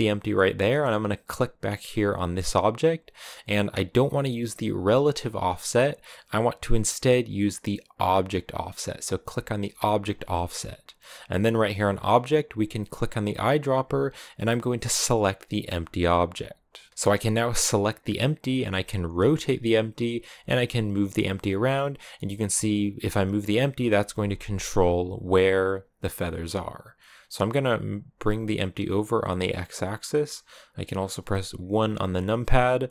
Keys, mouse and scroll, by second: 1.3-7.8 right drag, 7.8-13.2 drag, 17.6 right click, 18.4 r, 20.2 g, 22.0 g, 31.8 KP_1.